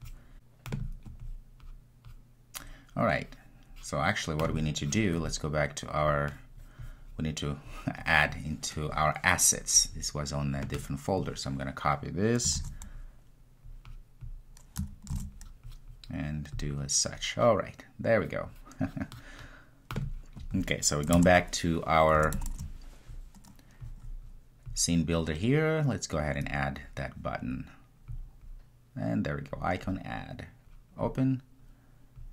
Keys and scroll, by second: 16.7 super+v.